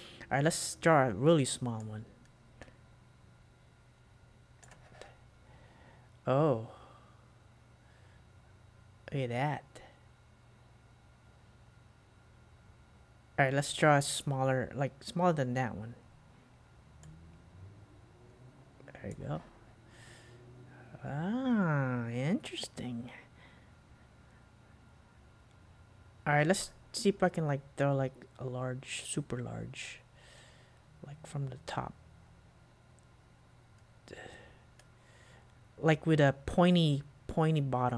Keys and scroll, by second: 4.7 super+q, 19.2 super+q.